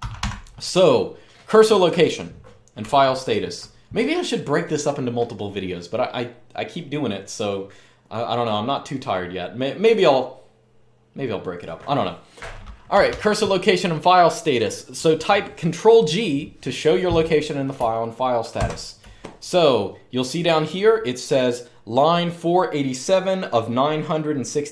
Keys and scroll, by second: 0.0-0.4 typing, 2.6-3.2 j, 12.7 typing, 18.3 ctrl+g.